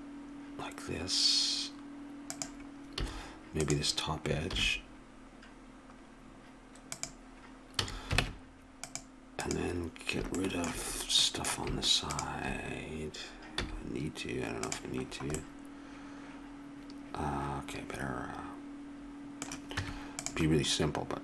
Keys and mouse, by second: 3.0 a, 3.6 click, 4.5 ctrl+b, 7.8 a, 8.2 ctrl+Tab, 10.4-11.7 drag, 12.1-13.6 drag, 13.6 x, 17.6-19.8 middle drag, 19.8 Tab.